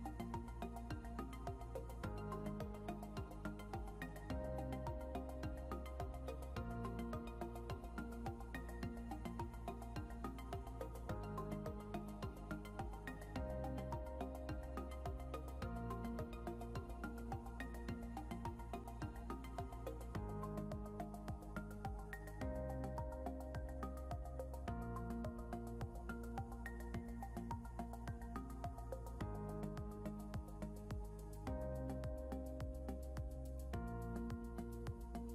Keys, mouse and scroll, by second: 0.1 click, 1.9 scroll up 1, 5.1 Right, 6.2 Down, 7.3 Left, 7.9 scroll down 1, 9.5 shift+click, 10.7 ctrl+g, 11.5 click, 12.0-13.0 typing, 13.3 click, 13.9 scroll up 1, 15.2 click, 24.3 ctrl+z, 25.0 click, 26.1 shift+click, 31.4 scroll up 1, 32.5 click, 34.4 scroll down 1.